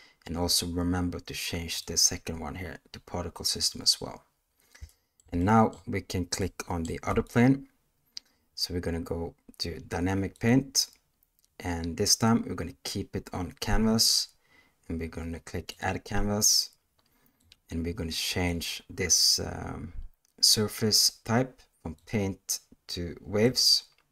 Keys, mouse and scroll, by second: 1.8-3.6 drag, 4.8 shift+middle click, 5.4 middle click, 6.4-6.8 middle drag, 7.1 click, 10.3 click, 15.6 click, 17.3-18.6 drag, 21.9-23.5 drag.